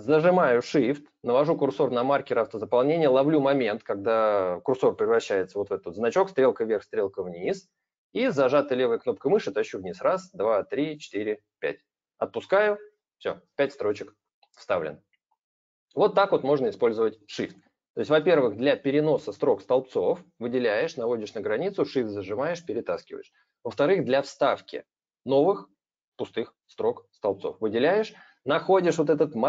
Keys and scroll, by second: 18.0 ctrl+z, 18.2 ctrl+z.